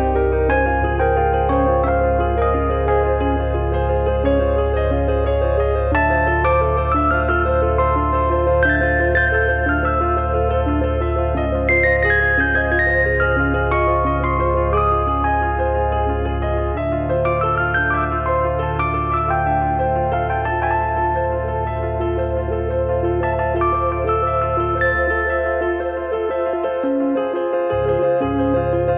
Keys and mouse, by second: 0.4 click, 2.8 d, 2.9 click, 7.6 d, 8.6 click, 17.7 click, 21.9 click, 25.9 click, 28.3 click.